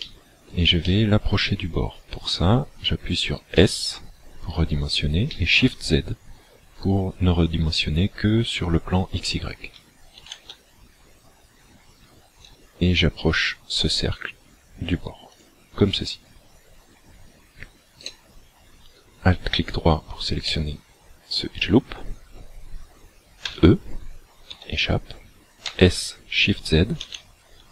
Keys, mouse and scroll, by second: 0.0 shift+middle click, 0.9 middle click, 3.5 s, 15.4 shift+click, 18.0 alt+right click, 20.5 middle click, 23.4 e, 25.7 s.